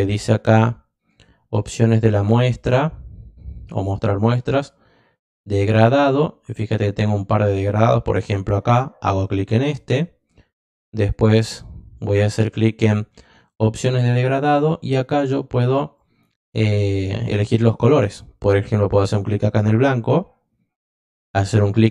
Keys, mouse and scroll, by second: 3.5 click, 5.4 click, 7.7 click, 13.3 click, 15.1 click, 18.9 click.